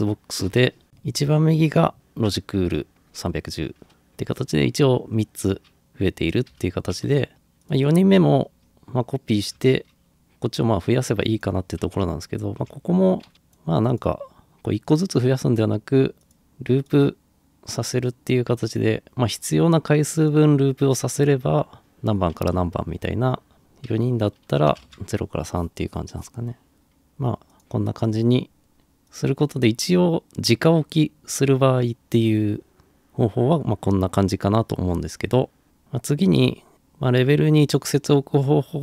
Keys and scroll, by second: 6.5 Escape, 12.7 Delete, 16.3 typing, 23.5 Return, 23.5 2, 24.7 3, 24.9 Return.